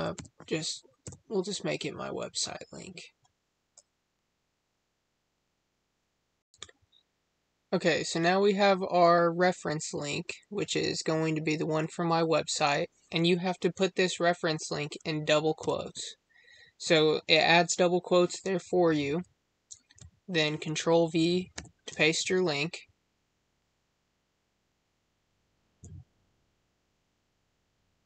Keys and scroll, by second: 21.4 ctrl+v.